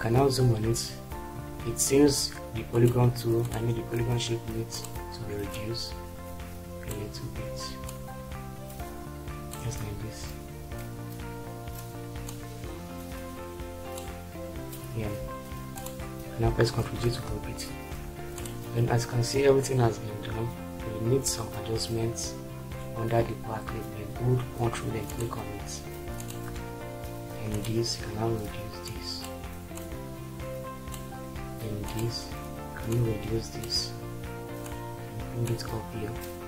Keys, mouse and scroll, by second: 16.8 ctrl+g, 17.8 shift+F4.